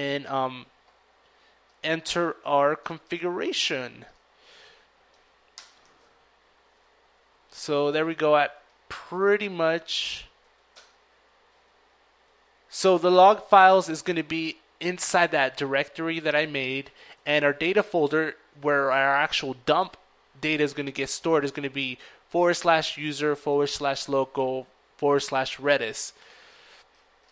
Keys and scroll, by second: 3.2 ctrl+i, 3.2 $, 3.5 ctrl+v, 4.7 ctrl+Up, 5.1 ctrl+Up, 5.3 ctrl+Up, 5.5 ctrl+Up, 5.7 ctrl+Up, 6.0 ctrl+Left, 6.5 ctrl+Left, 6.7 ctrl+Left, 8.3 ctrl+Left, 10.3 ctrl+Right, 10.6 ctrl+Up, 10.9 ctrl+Right, 11.4 ctrl+Right, 14.8 ctrl+Down, 14.8 shift+4, 15.0 ctrl+Down, 15.2 ctrl+Down, 15.6 ctrl+Up, 24.0 ctrl+Escape, 25.0 ctrl+:, 25.3 ctrl+w, 25.5 ctrl+q, 25.5 ctrl+w, 25.7 ctrl+Return, 26.6 ctrl+:, 26.9 ctrl+w, 27.1 ctrl+q.